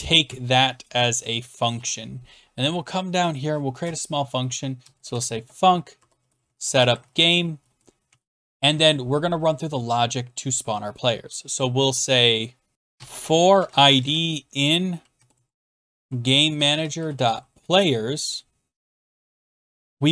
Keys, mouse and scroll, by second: 0.0-2.2 typing, 3.4 click, 3.8 Return, 4.5-8.5 typing, 12.7-19.4 typing.